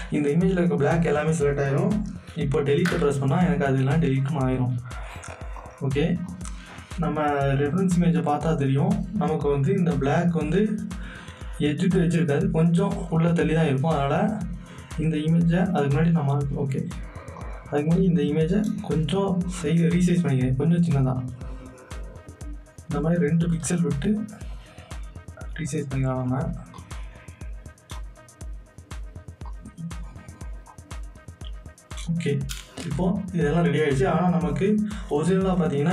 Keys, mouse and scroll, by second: 4.2 click, 13.1 click, 15.6 click, 19.6-24.1 drag, 24.1-32.8 drag, 32.8 Return.